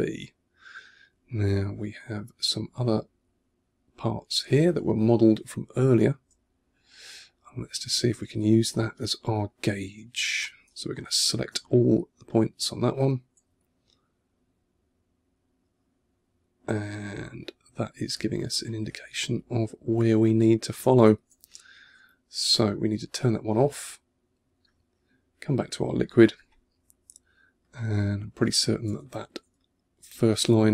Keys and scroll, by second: 11.0 super+a, 11.9 2, 13.4 1, 20.0 2, 21.3 1, 26.7 2, 28.9 1, 29.4 2.